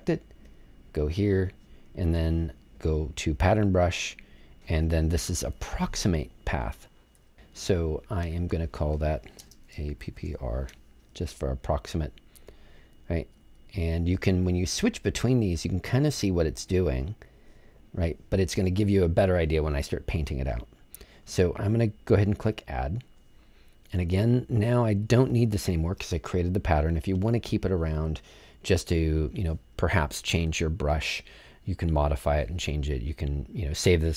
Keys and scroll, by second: 9.3-10.7 typing.